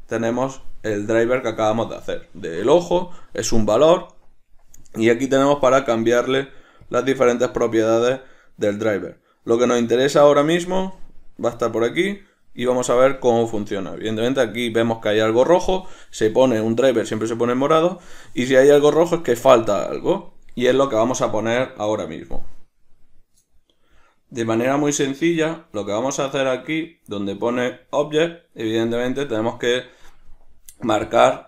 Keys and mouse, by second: 0.5 click, 6.5 click, 7.0 click, 7.4 click, 8.3 click, 25.5-31.4 drag.